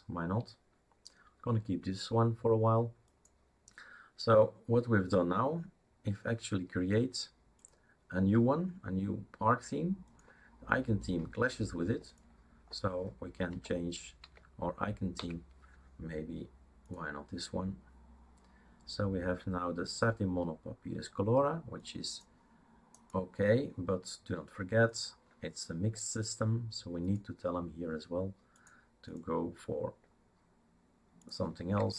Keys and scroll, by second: 13.6 Down, 14.2 Down, 15.1 Up.